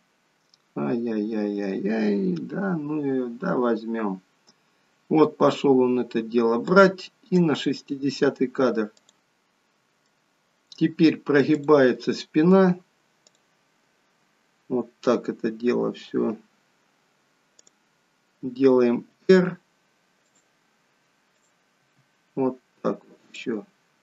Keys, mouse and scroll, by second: 9.2 middle click, 11.5 click, 13.2 click, 17.5 click, 19.1 r, 21.3 click, 21.8 r.